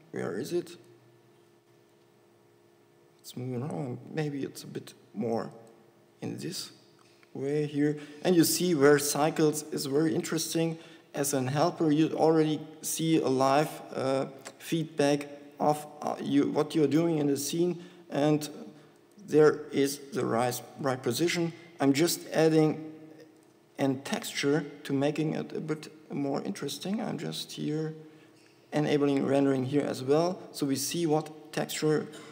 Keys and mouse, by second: 0.1 g, 4.3 g, 6.7 KP_7, 8.5 g, 14.3-15.8 drag, 15.8 g, 18.0 s, 20.3 g.